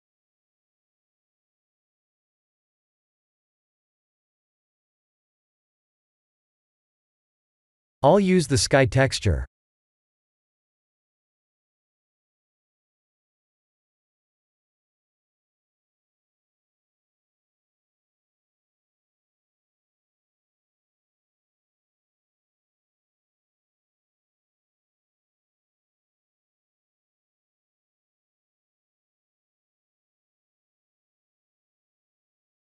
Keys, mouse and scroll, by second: 1.0 click, 2.8 click, 3.1 click, 7.3 click, 8.4 click, 13.6 click, 16.5 click, 20.3 click, 26.3 click, 30.4 click.